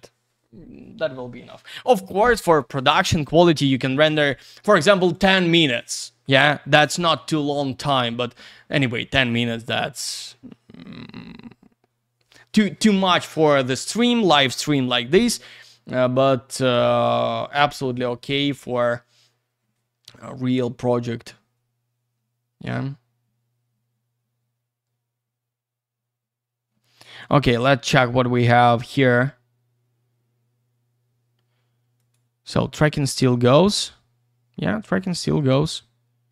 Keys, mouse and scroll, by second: 1.4-2.6 scroll down 1, 11.9-13.1 scroll down 1, 22.3 scroll up 1, 23.1-23.5 scroll down 1, 24.0 scroll up 1, 25.2-25.7 scroll down 1, 32.4 click.